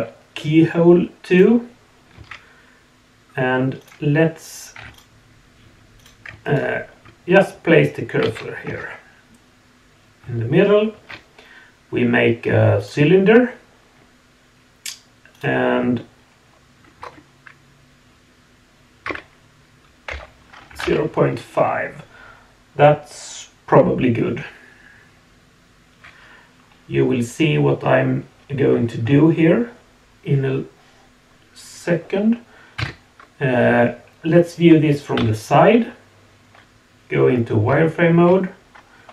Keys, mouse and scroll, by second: 1.3 click, 2.2 Tab, 3.8 click, 4.8 3, 4.9 click, 6.0 click, 6.4 shift+right click, 8.2 alt+a, 8.7 Tab, 12.9 shift+a, 15.3-20.8 drag, 32.8 KP_1, 35.2 KP_3, 35.2-37.7 middle drag, 37.7 z.